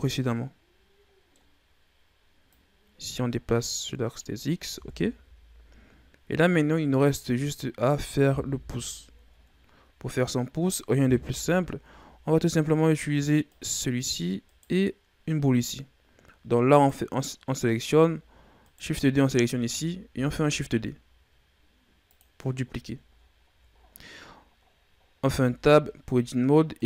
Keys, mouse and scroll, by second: 0.0-2.3 middle drag, 2.3-4.6 drag, 4.6 KP_1, 5.0 Tab, 5.8-6.4 scroll down 5, 6.4-7.0 scroll down 3, 7.0-8.3 middle drag, 8.3 KP_1, 9.4-10.3 scroll down 1, 10.3-11.1 scroll up 3, 11.1 KP_3, 12.0-12.4 scroll down 2, 12.4-13.3 scroll up 5, 13.3 right click, 14.4 right click, 16.5 right click, 18.5 shift+right click, 20.2 shift+d, 22.6-24.3 scroll down 7, 25.3 Tab, 26.7 right click.